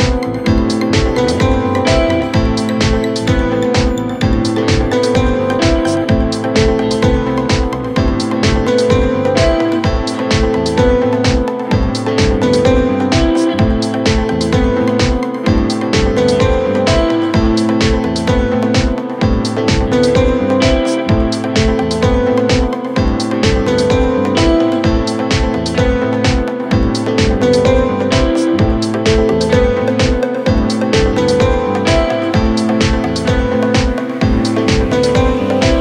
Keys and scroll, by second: 9.8-12.1 typing, 16.5 ctrl+k, 16.8 Escape, 35.3 shift+Page_Down, 35.5 ctrl+Page_Up.